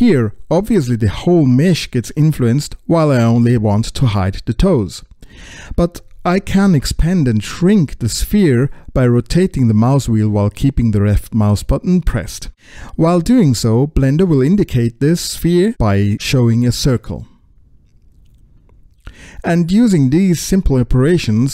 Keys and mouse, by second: 0.4-10.5 drag, 12.7-14.9 drag, 15.3 middle click, 17.1-20.4 drag, 20.9 click, 21.1 middle click, 21.3 middle click.